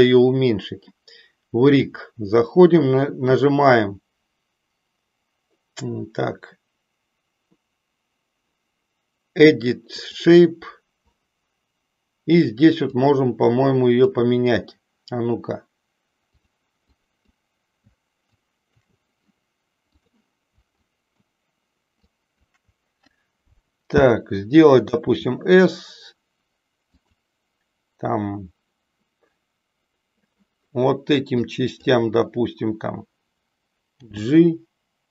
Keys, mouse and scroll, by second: 1.8 click, 10.1 click, 12.8-14.1 drag, 16.3 click, 16.9 click, 18.3 shift+click, 19.9 click, 20.7 shift+click, 21.9 shift+click, 25.1 s, 31.4 click, 34.1 g.